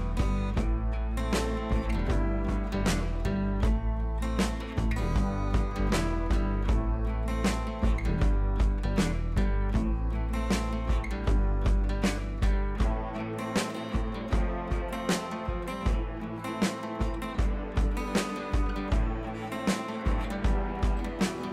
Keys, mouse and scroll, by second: 7.1-8.4 scroll down 2, 8.4 scroll down 1, 9.7 click, 11.4 scroll up 1, 12.2 click, 14.1 ctrl+z, 14.8 click, 16.5 scroll up 1, 16.8 scroll down 1, 17.3 scroll up 1, 17.9-18.5 alt+click, 18.7 ctrl+z, 20.0 click, 20.5-21.5 scroll down 1.